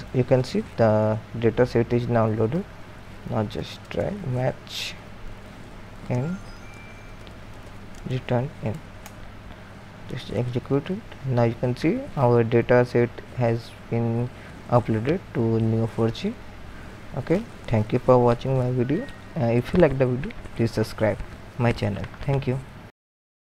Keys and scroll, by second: 3.0-10.3 typing, 9.0 ctrl+^.